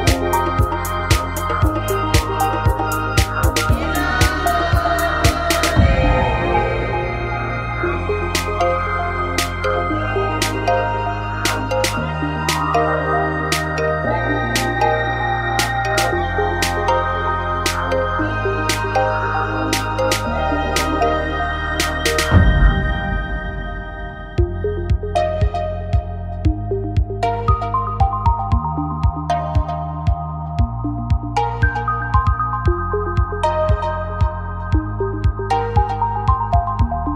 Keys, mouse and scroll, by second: 0.7 s, 1.8 click, 2.3 s, 5.9 n, 7.0 n, 11.2 f, 11.3 a, 12.2 f, 12.3 a, 13.8 f, 13.9 s, 15.5 f, 15.6 a, 17.4 f, 17.5 a, 18.5 f, 18.6 a, 21.2 n, 22.4 click, 22.6 n, 22.9 click, 24.3 g, 28.6 click, 29.0 right click, 29.8-31.0 middle drag, 30.3 click, 30.3 right click, 31.7-32.8 middle drag, 32.8 g, 33.6 click, 35.1 g, 36.5 click.